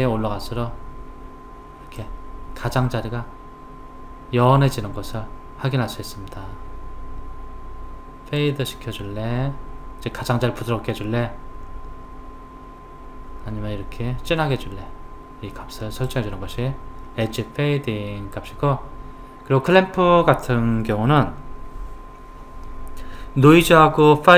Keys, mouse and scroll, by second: 8.4 click.